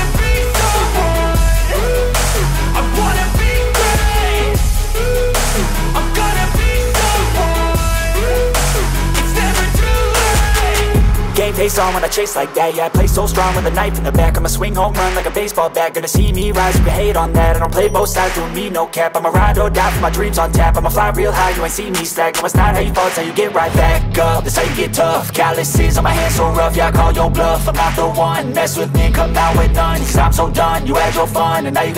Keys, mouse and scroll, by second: 2.2 space, 2.4 middle drag, 2.9 shift+a, 4.2 s, 4.9-5.7 drag, 7.5 click, 8.2 click, 8.5 space, 10.0-10.3 drag, 11.7 click, 13.4 space, 15.2 click, 16.3 click, 17.2 click, 17.5 click, 18.2-19.5 drag, 21.0 click, 21.8 click, 22.3 KP_Decimal, 22.5 KP_1, 22.7-23.5 drag, 24.2 click, 24.5 space, 27.4 click, 28.4 drag.